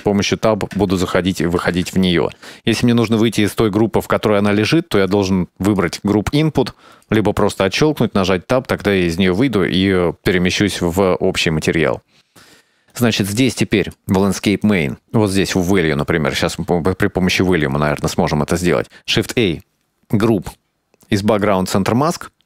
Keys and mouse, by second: 0.1 Tab, 0.8 Tab, 1.8 Tab, 5.0 right click, 5.7 click, 7.7 Tab, 10.7 middle click, 12.2 click, 14.0 click, 14.8-16.6 middle drag, 17.0 middle click, 18.2 middle click, 18.9 shift+a.